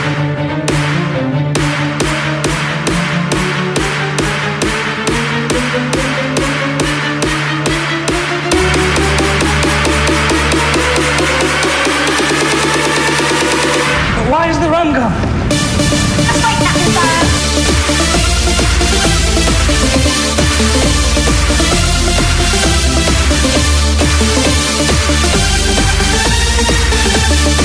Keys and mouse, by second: 0.6 KP_Add, 1.3 KP_Add, 10.6-12.3 right drag, 22.9-26.6 drag, 27.3 KP_Subtract.